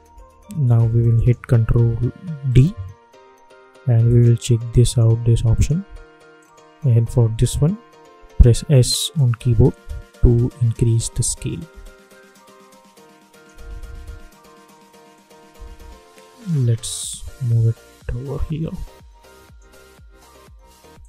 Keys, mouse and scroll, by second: 0.0 space, 1.1 click, 2.4 ctrl+d, 4.0 click, 8.3 s, 9.1-21.0 drag.